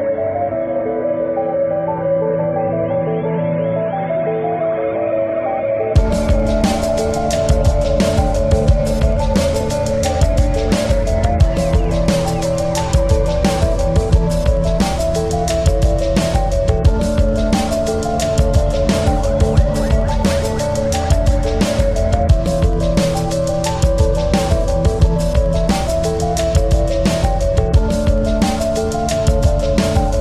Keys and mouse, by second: 0.0-1.5 drag, 1.7-3.2 drag, 3.3 click, 5.1 ctrl+=, 5.7 space, 6.1 click, 6.3 space, 6.7 space, 7.0 click, 8.3 click, 10.3 click, 11.8 click, 14.9 click, 15.1 click, 18.3 click, 19.3 click, 21.3 click, 22.3 alt+click, 23.5 alt+click, 24.1-28.3 shift+drag, 28.5 click, 28.7 shift+click, 29.9 alt+click.